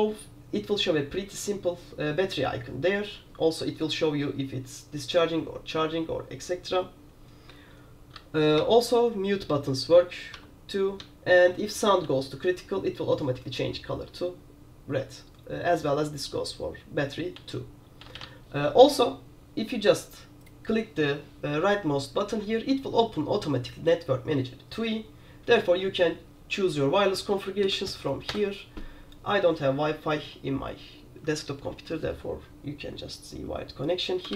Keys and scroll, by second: 27.7 Down, 28.4 Return.